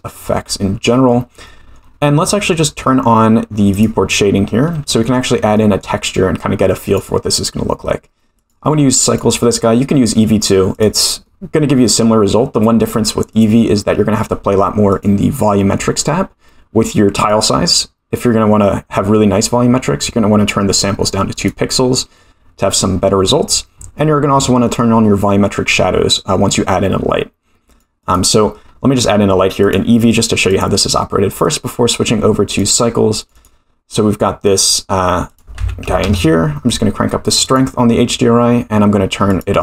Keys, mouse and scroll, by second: 0.0-0.3 middle drag, 1.4 middle click, 3.8 click, 5.0 shift+middle drag, 5.5 middle click, 6.8 click, 8.3-9.2 drag, 10.7 click, 11.2 middle click, 12.8-13.4 drag, 14.9 click, 15.7-16.6 scroll down 1, 16.6-17.2 scroll down 2, 17.2-21.7 drag, 24.7 click, 27.7 click, 28.0 click, 28.7-29.6 scroll up 6, 29.6-30.7 drag, 31.4 click, 33.4 click, 35.2-36.7 drag, 37.4 click, 37.8-38.8 scroll down 5, 38.8-39.3 scroll down 1, 39.3 click.